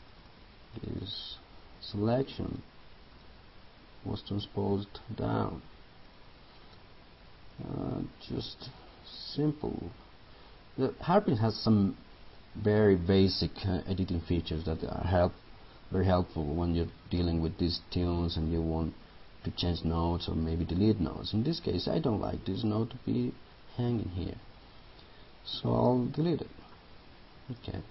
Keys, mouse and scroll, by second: 0.1-1.8 drag, 22.6 right click, 26.7 click.